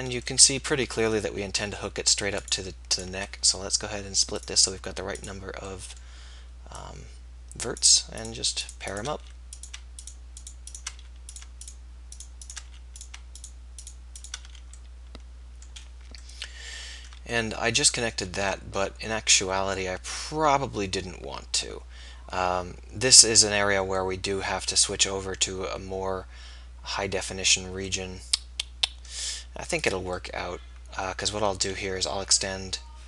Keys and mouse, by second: 9.3 f, 11.1 f, 12.7 f, 14.6 f, 26.4-27.7 middle drag, 28.3-31.6 right drag.